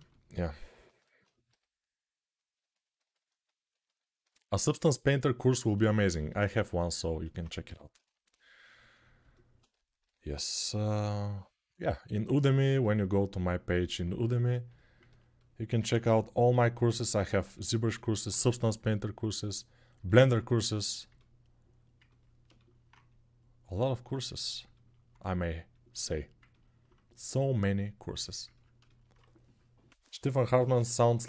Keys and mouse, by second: 1.2 g, 7.4 g.